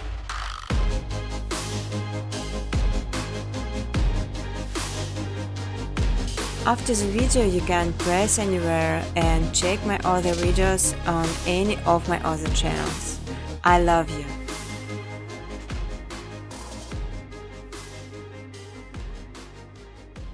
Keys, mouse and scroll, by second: 2.4 click, 5.9 click, 10.5 click, 10.7 space, 13.1 space, 14.9 click, 16.2 ctrl+z, 16.5 ctrl+z, 17.0 space, 18.5-20.3 typing.